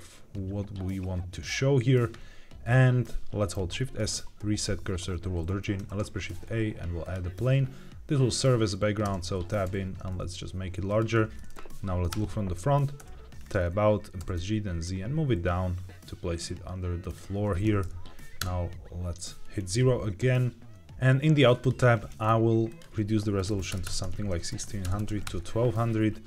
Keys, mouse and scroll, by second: 3.5 shift+s, 5.8 shift+a, 7.4-8.9 scroll down 1, 8.9 scroll down 1, 9.0 Tab, 9.6 s, 10.8 click, 12.0 KP_1, 12.9 Tab, 13.3-13.9 scroll up 2, 14.1 g, 14.3 z, 16.9 shift+click, 18.3 KP_0, 19.3-20.0 scroll up 2, 21.5 click, 22.6-25.2 drag, 23.7 KP_0, 24.9 KP_0.